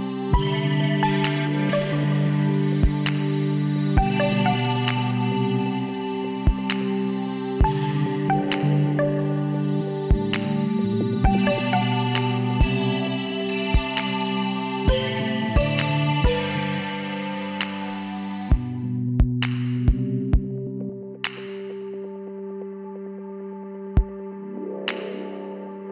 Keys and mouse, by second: 1.0-2.9 drag, 3.6 e, 5.1-6.8 drag, 9.1 s, 15.7 e, 17.1-18.9 drag, 20.0 s, 21.2 e, 22.3-24.0 drag.